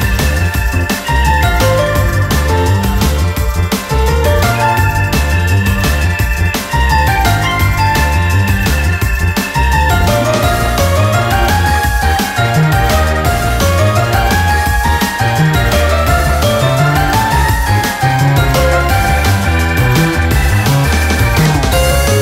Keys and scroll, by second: 0.1 ctrl+-, 2.3 ctrl+-, 7.4 ctrl+-, 14.3 ctrl+-, 17.2 typing.